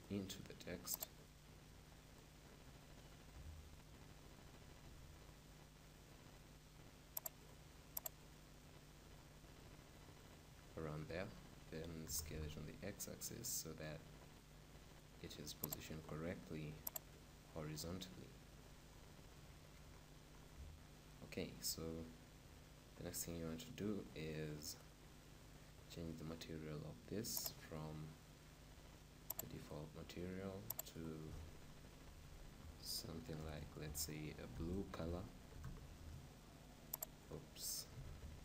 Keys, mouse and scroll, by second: 3.2 s, 7.3-10.2 drag, 11.9 s, 15.9-19.2 drag, 18.7-22.6 middle drag, 22.7-24.9 middle drag, 24.9-26.8 right drag, 27.4-29.2 drag, 29.4-32.5 drag, 32.6 click, 33.5 BackSpace, 37.1-38.4 drag.